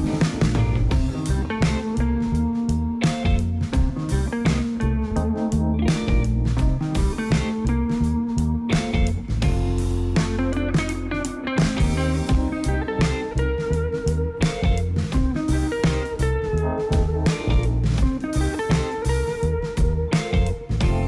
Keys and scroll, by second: 9.1 alt+a, 19.2 Tab.